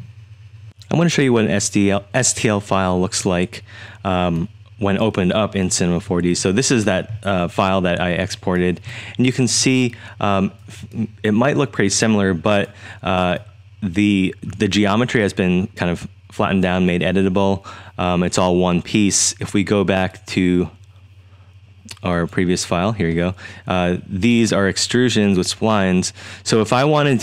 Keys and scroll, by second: 4.4-5.1 typing, 6.1 super+z, 7.9-12.2 typing.